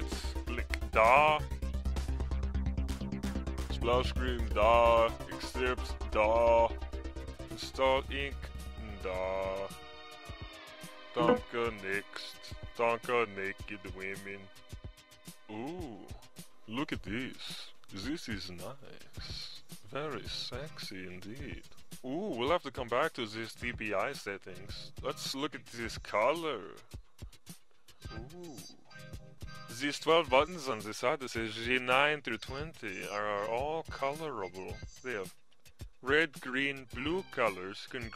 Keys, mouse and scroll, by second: 18.5 Insert, 18.7-23.7 drag, 23.7 right click, 25.0-30.0 drag, 37.5 click.